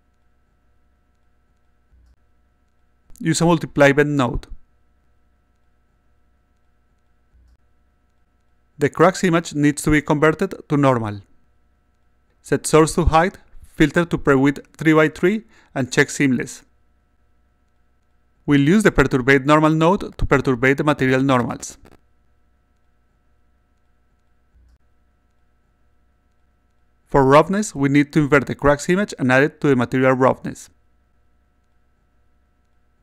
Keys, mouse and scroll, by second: 0.1-1.1 drag, 2.7 click, 4.4 click, 5.2-8.3 drag, 9.1 click, 10.3-11.5 drag, 12.6 click, 13.2 click, 13.6 click, 14.5 click, 16.4 click, 18.4 click, 20.0-21.3 drag, 22.0-23.0 drag, 23.9 click, 24.8 click, 25.4-26.4 drag, 27.7 click, 28.5-30.5 drag, 31.3 click, 32.4 click.